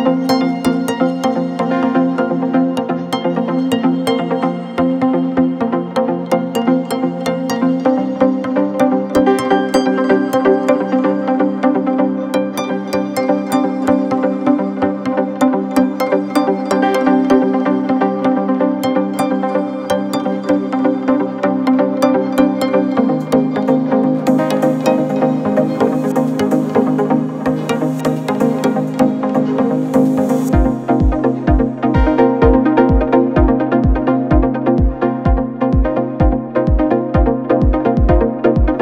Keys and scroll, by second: 0.1 2, 2.1 shift+i, 9.5 ctrl+z, 13.8 4, 14.7 2, 18.3 4, 19.7 shift+i, 27.6 ctrl+d, 27.8 Escape, 29.1 ctrl+d, 29.3 Escape, 32.3 ctrl+d, 32.4 Escape, 36.4 ctrl+F1, 37.6 1.